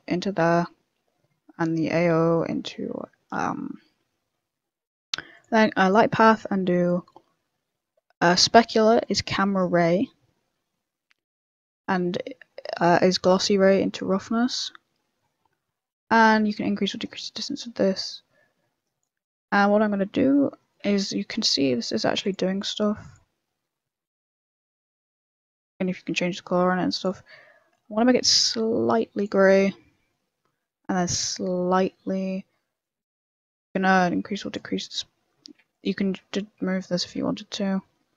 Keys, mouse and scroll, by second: 1.5 middle click, 1.5 scroll down 2, 1.6 middle click, 2.7 shift+a, 9.0 click, 10.3 middle click, 13.0 click, 14.5 middle click, 14.9 scroll up 3, 15.0 middle click, 15.8 click, 17.9 click, 20.5 middle click, 20.9 z, 21.2 middle click, 21.5 scroll up 3, 21.7 middle click, 22.2 click, 22.4 m, 23.0 click, 23.3 m, 24.3 m, 25.3 click, 29.4 middle click, 29.6-29.9 scroll down 4, 29.9 middle click, 30.3 scroll up 1, 30.3 middle click, 32.8 click, 33.6 click, 34.7 middle click, 35.1 scroll up 2, 35.7 click, 35.7-36.1 scroll up 1, 36.1 ., 36.6 m, 37.2 m, 37.7 middle click.